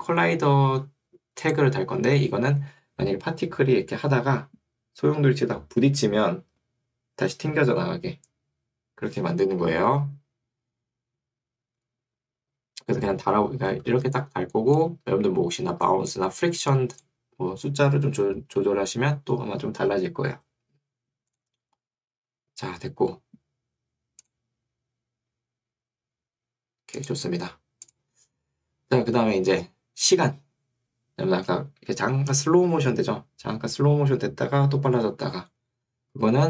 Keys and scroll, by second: 18.1 Escape.